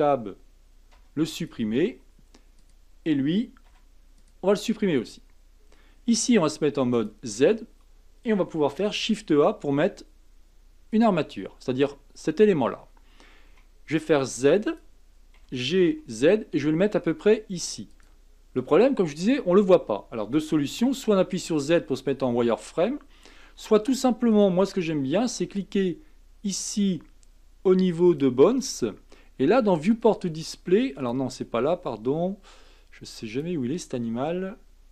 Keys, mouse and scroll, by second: 0.9 x, 2.6 click, 3.7 x, 5.2-6.0 scroll up 2, 6.1 z, 9.0 shift+a, 13.5 s, 15.4 g, 21.3 z, 23.6 z, 28.0 click, 29.9 click, 31.0 click, 33.3 click.